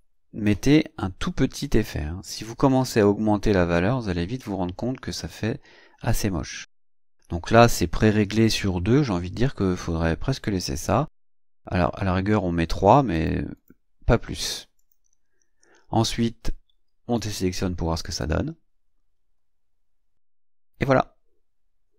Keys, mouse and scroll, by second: 2.7-11.6 drag, 13.1 click, 13.6 click, 14.8 click, 18.0 click.